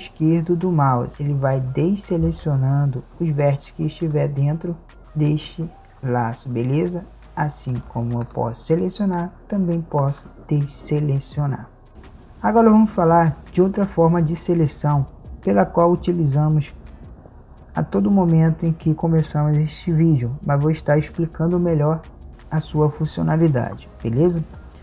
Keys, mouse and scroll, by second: 5.6-7.6 drag.